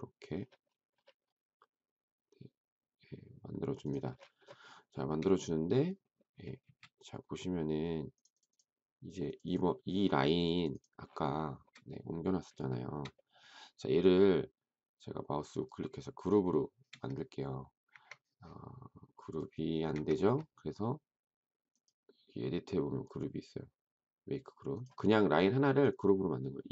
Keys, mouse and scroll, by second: 4.9 shift+middle click, 6.6 space, 11.4 shift+middle click, 12.6 shift+middle click, 12.8 shift+middle click, 17.8 Escape, 19.9 Escape.